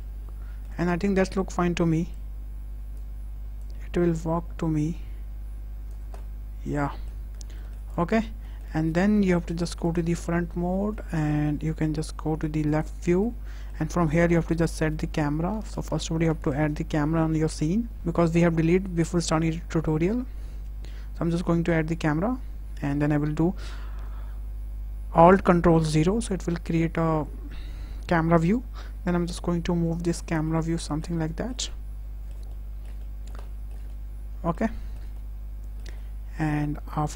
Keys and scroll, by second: 9.1 `, 11.8 `, 16.4 shift+a, 25.6 ctrl+alt+KP_0.